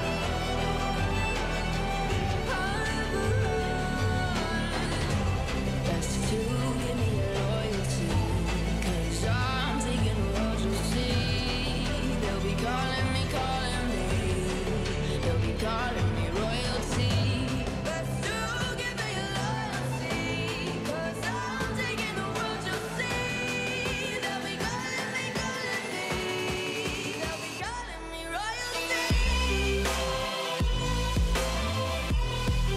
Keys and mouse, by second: 2.6 2, 5.2-5.6 middle drag, 6.1 2, 7.7-8.2 middle drag, 8.4 g, 9.8-14.6 typing, 11.4-11.9 middle drag, 13.5 middle click, 15.9 g, 17.2-17.6 middle drag, 17.9 s, 18.9 y, 19.0 y, 19.2 click, 19.2 middle click, 19.9-22.7 drag, 23.8-26.0 typing, 27.2 r, 28.3 g, 29.2 x, 29.2 x, 29.6-31.2 middle drag, 31.4 middle click.